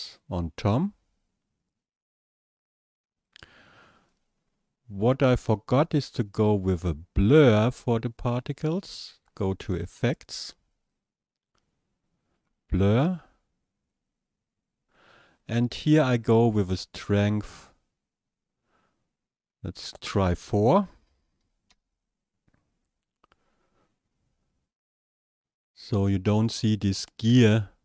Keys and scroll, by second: 20.9 KP_4.